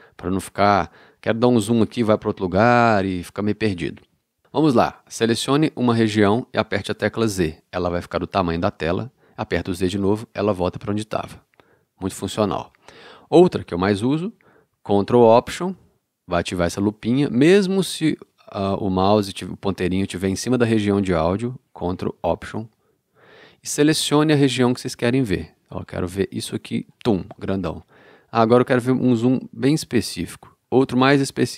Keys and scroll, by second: 7.4 z, 9.7 z.